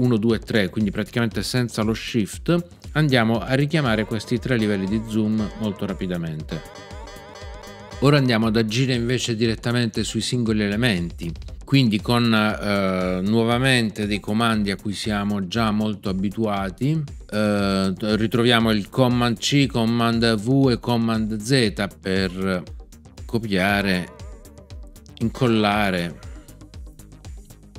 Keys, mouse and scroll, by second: 3.7 ctrl+alt+super+1, 4.5 ctrl+alt+super+2, 5.3 ctrl+alt+super+3, 6.4 ctrl+alt+super+1, 6.7 ctrl+alt+super+2, 7.0 ctrl+alt+super+3, 7.3 ctrl+alt+super+1, 7.6 ctrl+alt+super+2, 7.8 ctrl+alt+super+1, 23.5 super+c, 25.3 super+v.